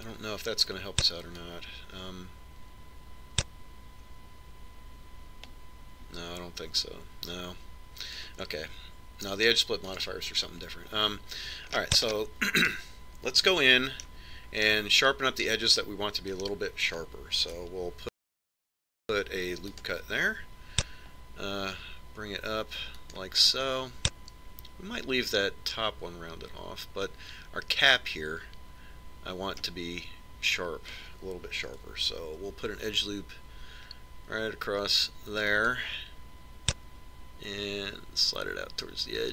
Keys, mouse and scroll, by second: 3.3 click, 11.8 click, 13.7-18.6 middle drag, 20.0 ctrl+r, 24.5-26.3 middle drag, 33.6 ctrl+r.